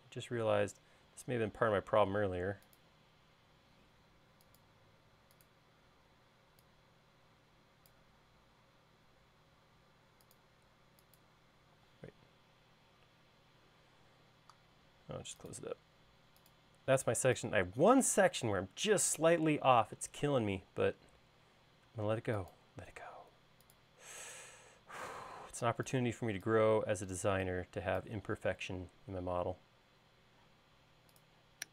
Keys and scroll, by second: 6.8 e, 9.2 l, 12.3 e, 15.3 l, 17.6 e, 22.1-24.0 typing, 25.7 space, 26.3 e, 29.6 space.